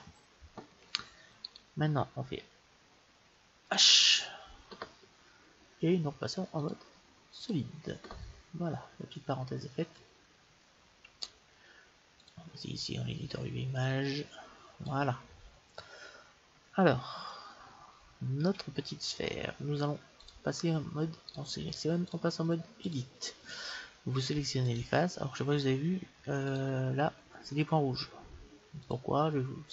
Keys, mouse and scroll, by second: 1.5-3.3 right drag, 3.7 h, 6.6-8.3 drag, 13.8-15.7 drag, 15.3-19.0 middle drag, 20.2-24.0 drag, 21.3-23.3 right drag, 24.7-28.4 drag, 28.8-29.7 drag.